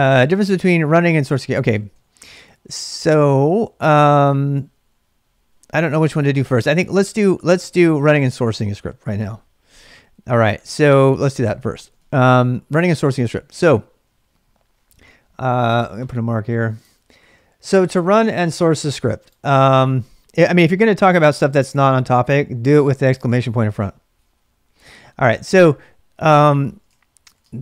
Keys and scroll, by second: 0.0-12.9 typing, 12.3 ctrl+[, 12.4 ctrl+j, 26.4-27.6 typing.